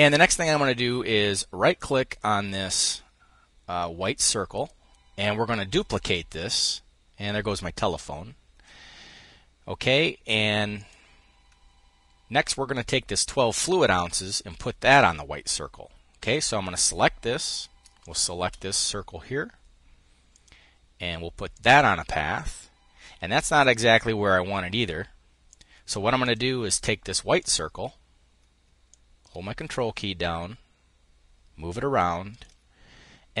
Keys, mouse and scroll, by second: 5.3 click, 10.3 click, 15.7 click, 17.6 shift+click, 19.9 click, 21.1 click, 25.0 click, 25.8 click, 27.0 click, 28.4-32.5 ctrl+drag, 32.9 click.